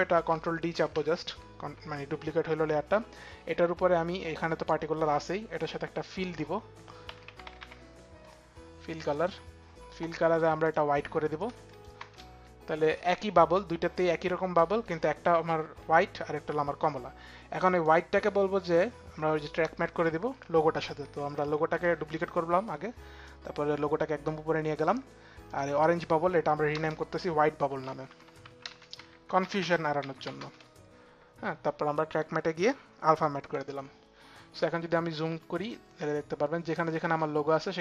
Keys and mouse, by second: 0.4 ctrl+d, 3.7 click, 5.6 click, 6.4-7.5 typing, 6.7 click, 10.2 click, 11.0 click, 11.2 click, 11.2 l, 11.5 Return, 17.4 click, 18.3 click, 21.4 ctrl+d, 21.4 click, 22.8 ctrl+d, 25.1 ctrl+d, 25.1 click, 26.3 Return, 27.1-30.3 typing, 32.1 click, 32.8-33.5 typing, 33.0 click.